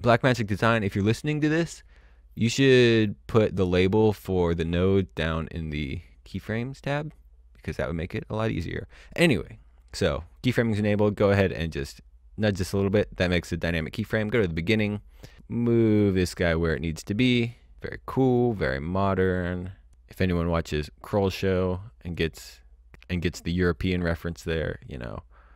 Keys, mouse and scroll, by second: 11.6 click, 13.8 click, 15.7 click, 20.7 click, 22.7 click.